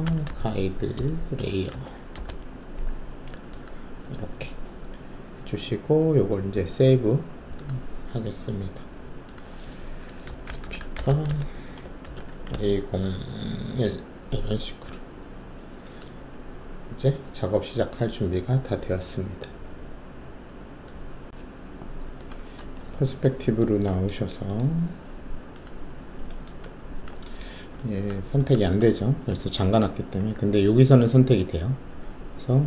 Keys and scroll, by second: 0.0-2.1 typing, 10.2-13.6 typing, 22.8 alt+shift+q.